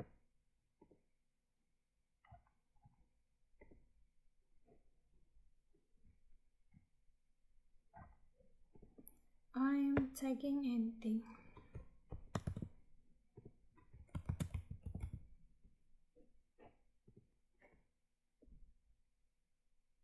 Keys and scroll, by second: 12.3 ctrl+v.